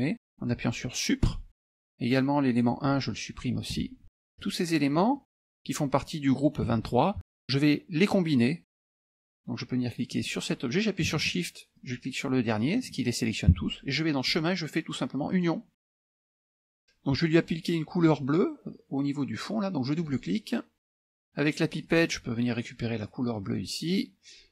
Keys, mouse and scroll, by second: 1.3 Delete, 2.7 click, 3.8 Delete, 4.4 click, 5.2 click, 6.8 ctrl+z, 10.2 click, 11.8 shift+click, 12.2 shift+middle click, 14.3 click, 15.4 click, 16.8 F1, 20.0 click, 21.9 click, 23.4 click.